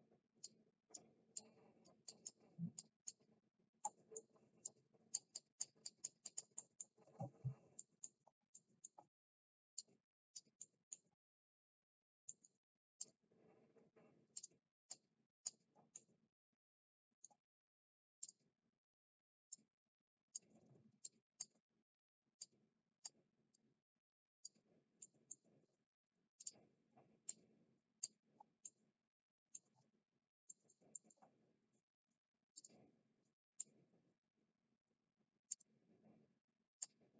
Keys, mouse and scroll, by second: 0.4 click, 1.3 click, 2.0 click, 2.7 click, 3.8 middle click, 4.6 click, 5.3 click, 5.8 click, 6.1 click, 6.6 middle click, 7.7 middle click, 8.5 middle click, 9.7 click, 10.6 middle click, 12.2 middle click, 13.0 click, 14.3 click, 14.9 click, 15.9-17.2 middle drag, 18.1 click, 19.5 click, 20.9 ctrl+z, 20.9 click, 22.3 middle click, 22.4 click, 23.4 middle click, 23.8 click, 25.0 middle click, 26.4 click, 27.2 click, 28.6 middle click, 30.5 middle click, 30.9 middle click, 32.5 click, 33.6-35.5 drag.